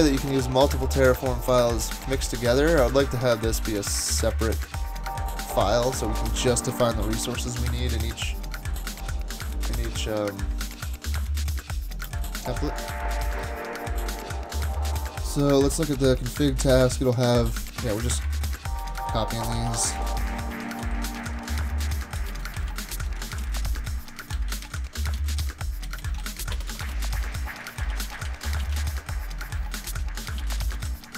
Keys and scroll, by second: 1.6 super+Tab, 2.6 shift+super+Tab, 18.3 Escape, 18.6-22.3 typing, 23.3 shift+super+Right, 23.4 Delete, 24.4 Up, 24.5 Up, 24.7 Delete, 24.8 Delete, 25.0 Down, 25.2 Down, 25.4 Delete, 25.9 Up, 26.0 Up, 26.2 super+Right, 26.5 alt+BackSpace, 26.7 alt+BackSpace, 26.9 alt+BackSpace, 27.6-31.1 typing.